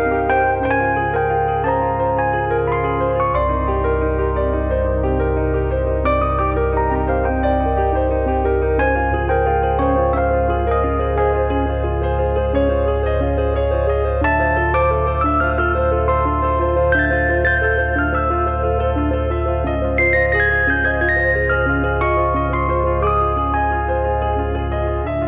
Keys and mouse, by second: 1.5 click, 3.9 click, 4.7 click, 5.2 middle click, 5.6 click, 6.8 middle click, 8.0 click, 10.1 click, 10.7 middle click, 11.8 click, 14.6 middle click, 15.3 click, 15.7 click, 17.5 middle click, 18.0 click, 19.3 click, 21.0 middle click, 21.9 click, 23.5 middle click, 24.9 middle click.